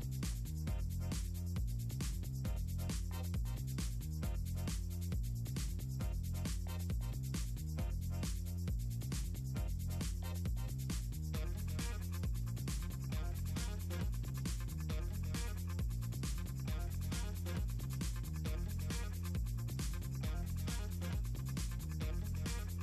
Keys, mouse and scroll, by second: 1.1-3.7 drag, 3.9 click, 5.1 click, 5.8 click, 6.1-11.1 drag, 11.6 click, 13.2 click, 14.0 a, 15.9 t, 16.7 click, 17.6 click, 17.8 click, 18.4 scroll up 2, 19.0 Delete, 19.1 Return, 19.6 scroll up 2, 19.8 click, 20.3 ctrl+s, 20.6 click, 21.2 scroll up 2, 21.4 scroll down 2, 21.6 click.